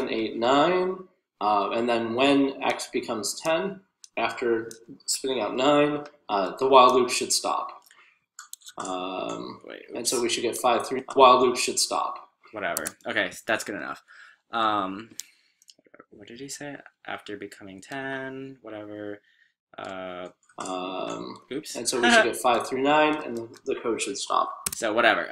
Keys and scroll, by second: 0.0-5.9 typing, 20.1 l, 21.2-22.0 typing.